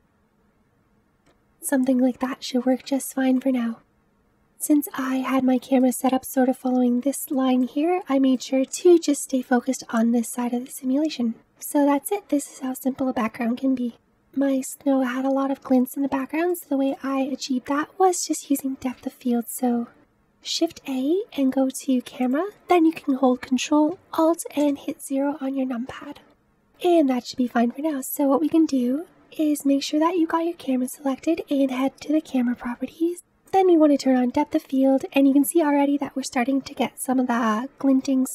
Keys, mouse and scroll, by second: 1.0 click, 2.1-2.5 scroll up 4, 2.9-3.3 scroll up 3, 3.7 middle click, 3.8-4.2 scroll down 3, 4.2-5.0 middle drag, 5.0-5.4 scroll up 3, 5.4-8.8 shift+middle drag, 8.8-10.1 scroll down 7, 10.1-11.3 scroll down 1, 11.3-12.9 scroll up 2, 12.9-13.8 scroll up 1, 13.8-14.1 scroll up 1, 14.1-15.9 middle drag, 15.9-16.7 scroll up 1, 16.7 middle click, 17.4 scroll up 3, 17.7-18.9 middle drag, 20.1-22.4 scroll down 1, 24.6-28.1 drag, 33.5 click.